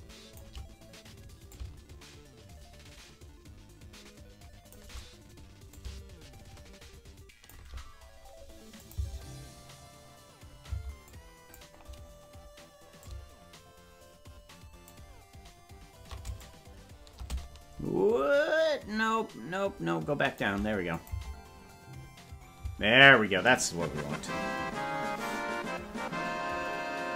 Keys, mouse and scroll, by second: 1.5-4.7 drag, 5.7-7.5 drag, 8.7-9.8 drag, 8.9 space, 10.6 space, 11.0 click, 13.0-14.9 drag, 16.3-20.4 shift+drag, 20.9-22.8 drag, 21.1 space, 22.6 space.